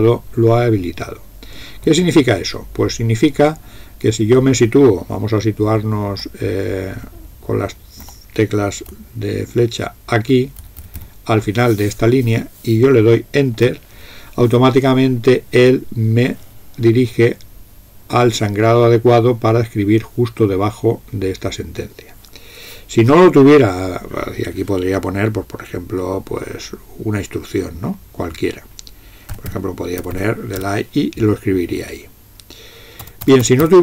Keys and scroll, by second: 6.1 Up, 7.0 Up, 7.2 Up, 7.4 Up, 7.6 Up, 8.9-10.7 Right, 10.8 Right, 11.0 Right, 29.2-31.1 typing, 33.1-33.7 typing.